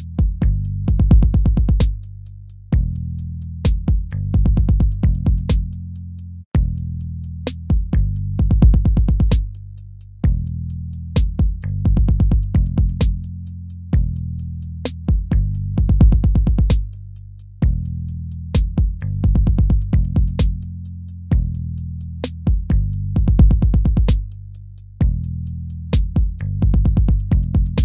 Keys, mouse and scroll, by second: 1.4 ctrl+v, 5.7 ctrl+z, 6.4 ctrl+-, 6.9 ctrl+v, 10.9 ctrl+-, 11.6 ctrl++, 12.7 ctrl++, 13.7 ctrl++, 20.5 ctrl+-, 21.9 ctrl+z, 27.6 ctrl+-.